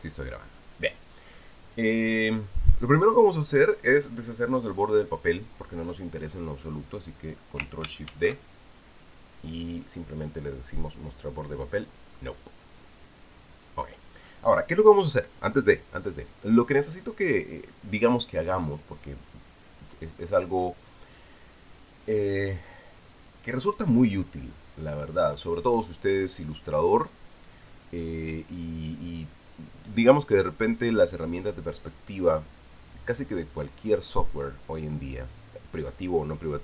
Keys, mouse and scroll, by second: 0.2 click, 8.9 ctrl+shift+d, 12.6 click, 14.4 click.